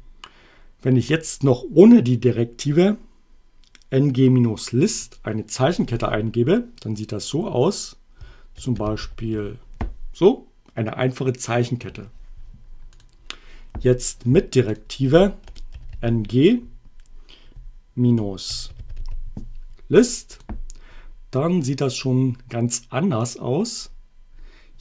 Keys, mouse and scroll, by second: 5.0 click, 8.3-9.8 typing, 13.0 click, 14.7 click, 15.5-16.4 typing, 17.9-19.5 typing, 20.3 click.